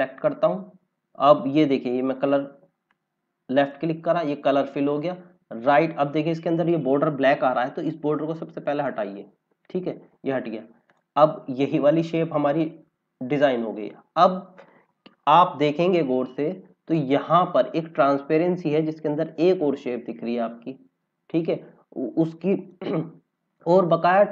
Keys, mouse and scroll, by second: 6.2-6.5 scroll up 2, 8.6 right click, 9.7 scroll down 1, 10.8 click, 11.2 scroll down 1, 12.3 click, 15.3 scroll up 1, 16.6-17.9 scroll down 1, 20.1 scroll down 1, 21.9 scroll up 1, 23.2-23.7 scroll down 1, 24.0 scroll up 1.